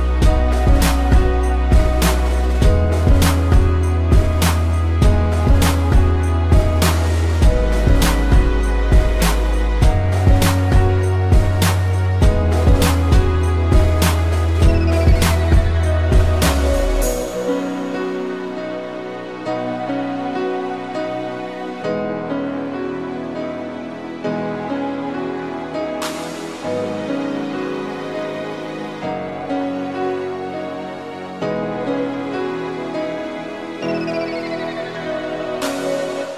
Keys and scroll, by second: 0.3 space, 1.6 space, 2.6 space, 4.0 space, 7.4 a, 9.5 ctrl+z, 10.2 space, 10.7 ctrl+-, 11.0 space, 11.4 ctrl+=, 11.7 p, 12.3 space, 14.6 space, 15.3 ctrl+z, 19.4 space, 20.3 space, 21.2 space, 22.0 space, 23.4 space, 26.3 space, 29.4 space, 30.8 space, 31.7 space, 34.0 p.